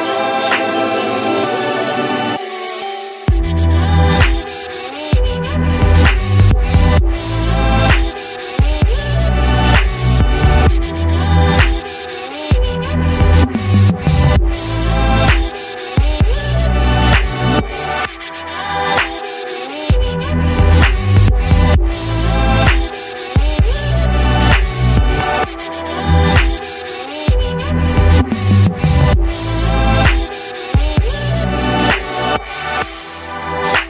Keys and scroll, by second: 5.7 ctrl+z, 7.1 Delete, 9.6 ctrl+c, 9.7 ctrl+f.